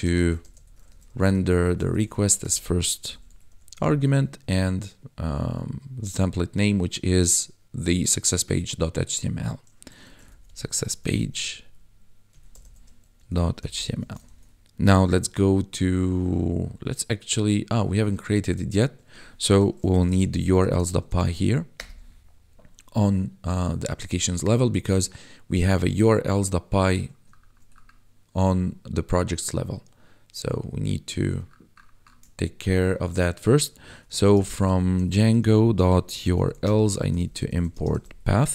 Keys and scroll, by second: 0.0-4.4 typing, 10.0-13.9 typing, 14.2 ctrl+s, 14.9 ctrl+b, 19.8-20.6 typing, 21.7 Return, 33.9-34.8 typing, 35.8-38.5 typing.